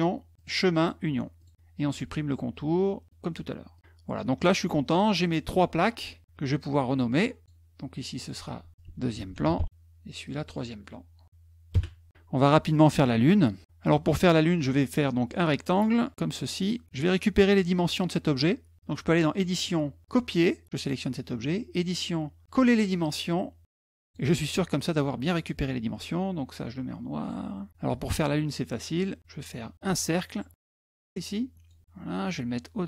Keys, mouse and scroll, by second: 1.2 click, 3.5 click, 4.8 middle click, 6.9 click, 7.3 click, 8.0 click, 8.1 click, 10.0 click, 11.1 click, 11.5 Return, 12.7 click, 15.1 click, 15.7 click, 17.3 click, 19.1 click, 20.5 click, 21.5 click, 23.8 click, 27.0 click, 29.1 click, 29.7-31.5 ctrl+drag, 32.0-32.8 drag.